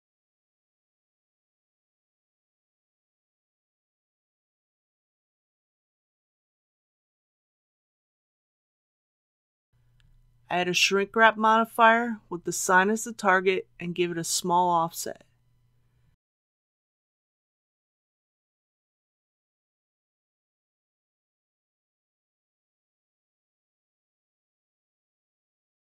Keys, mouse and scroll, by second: 6.1 ctrl+a, 7.1 click, 8.0 ctrl+a, 8.9 click, 23.6 KP_Decimal, 24.0 KP_0, 24.3 KP_1, 24.4 KP_5.